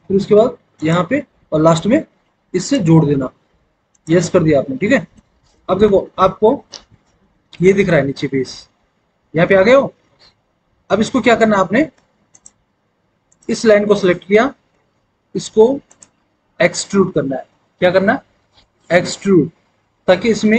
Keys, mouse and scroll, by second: 5.2 alt+w, 5.7 alt+w, 11.8 w.